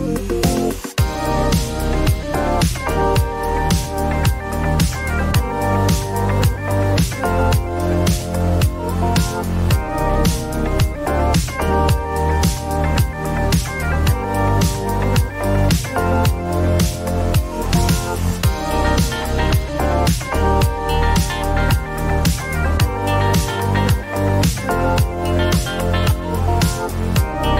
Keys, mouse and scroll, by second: 0.0 scroll, 1.2 click, 1.2 scroll down 4, 2.2 click, 4.0-4.7 scroll, 4.7 click, 4.9 scroll down 1, 6.4 click, 7.4 click, 7.9 click, 11.0 click, 12.5 click, 15.9 click, 18.2 click, 18.8 typing, 18.9 Return, 20.2 click, 20.4-21.3 typing, 22.5 scroll, 23.4 click, 25.1 click, 25.6 click, 26.3 click, 26.8 click.